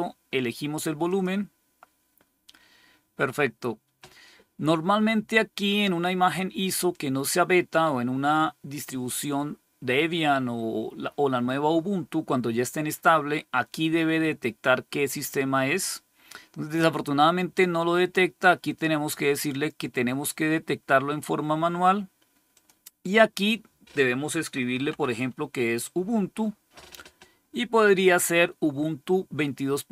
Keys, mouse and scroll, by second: 1.0 click, 19.4 click, 22.4 click, 24.2-25.3 typing.